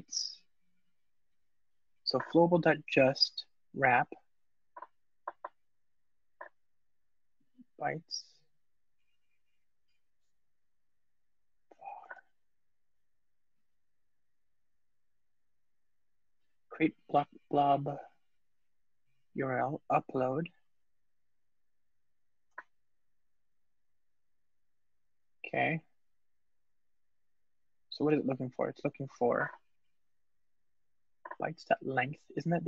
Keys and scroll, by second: 22.3 alt+super+v, 24.8 Return, 28.5 super+p.